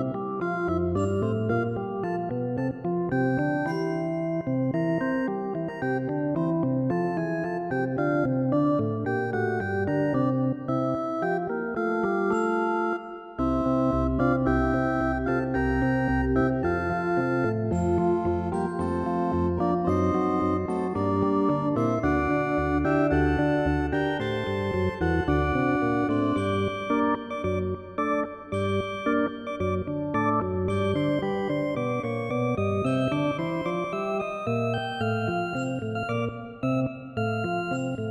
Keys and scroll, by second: 17.9 ctrl+i, 25.8 ctrl+z, 29.2 ctrl+alt+z.